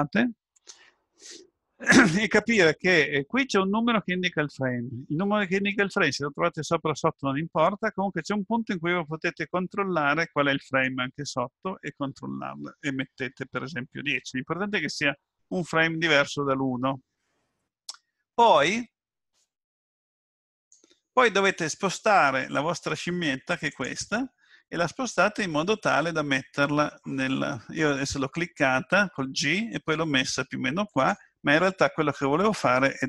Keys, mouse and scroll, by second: 10.7 click, 24.9 g.